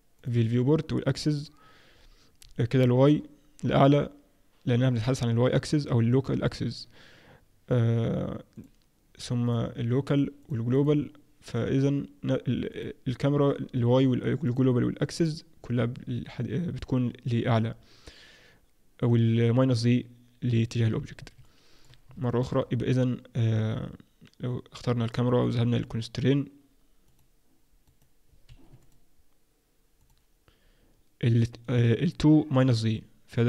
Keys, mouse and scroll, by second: 0.1 click, 1.3 click, 1.9-2.7 scroll up 1, 2.7 scroll up 1, 2.7 middle click, 8.5 click, 12.7 click, 14.4 click, 21.4 middle click, 22.2 shift+middle click, 22.6-23.3 scroll up 3, 25.4 click, 27.1 click, 27.9 right click, 28.8 click, 29.9 click, 32.5-33.4 scroll down 2.